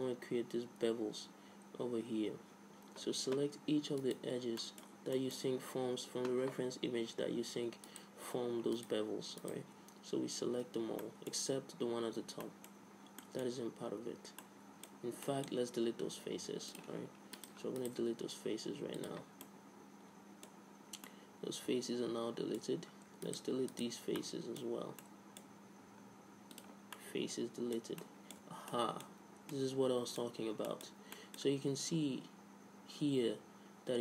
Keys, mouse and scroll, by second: 4.2 right click, 4.8-5.9 drag, 5.9-7.4 middle drag, 8.1-11.6 right drag, 11.6-17.0 middle drag, 17.0 click, 17.6-19.0 drag, 18.3 x, 19.0 right click, 19.7 middle click, 20.6 middle click, 22.3 middle click, 23.2 scroll up 1, 23.5-25.9 right drag, 25.9-27.9 middle drag, 25.9 x, 28.6 Tab, 29.8 middle click.